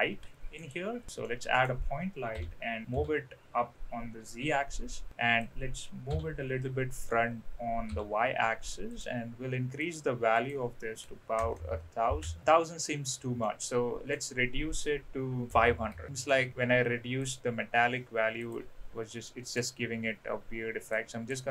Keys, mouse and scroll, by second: 1.2-1.6 middle drag, 3.2 g, 9.8 click, 10.3-12.4 drag, 11.6 KP_0, 11.8 KP_0, 13.4-14.2 middle drag, 14.2 scroll down 1, 15.5 click, 15.7 KP_0, 16.3 middle click, 17.2 click, 18.5 click, 19.3 middle click, 20.9-21.3 drag.